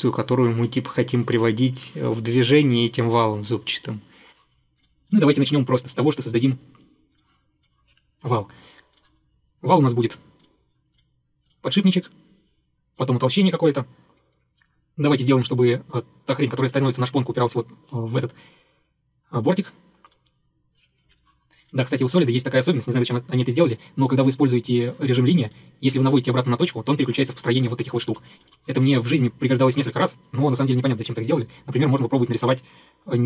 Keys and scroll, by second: 8.3 Escape, 21.1 Escape, 28.1 Escape, 28.2 Escape, 28.6 Delete.